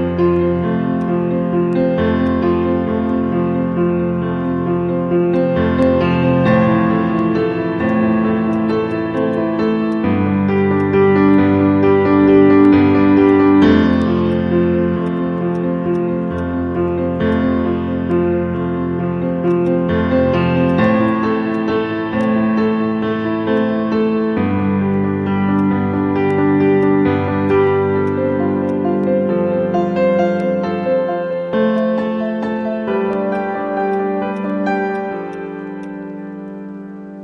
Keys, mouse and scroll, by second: 4.9 scroll down 1, 5.3 alt+click, 5.9 alt+middle click, 8.6 double click, 13.2 right click, 19.6 right click, 25.5 right click, 30.8 scroll up 1, 31.4 alt+middle click, 31.7 alt+click.